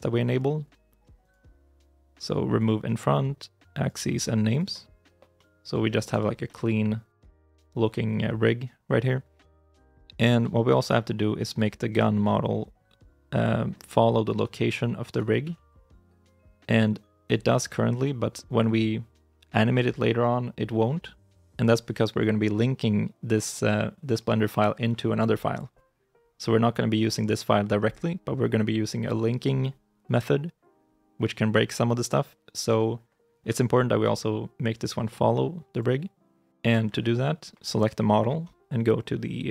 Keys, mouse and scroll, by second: 5.2 middle click, 5.7 shift+middle click, 5.9 shift+scroll down 2, 6.3 middle click, 7.6-9.4 scroll up 1, 10.4 shift+middle click, 11.4 right click, 11.8 scroll down 1, 12.3-14.3 scroll up 1, 14.9 right click, 15.3 g, 17.5 ctrl+z, 17.9 scroll down 1, 18.3-20.3 scroll up 1.